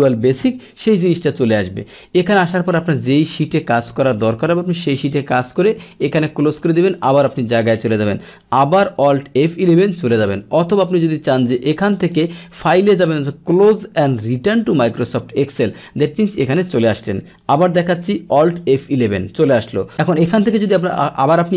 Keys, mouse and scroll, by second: 0.6 click, 2.7-5.9 middle drag, 5.9 click, 6.9 click, 9.7 alt+F11, 12.0 click, 14.6 click, 15.7 click, 18.9 alt+F11.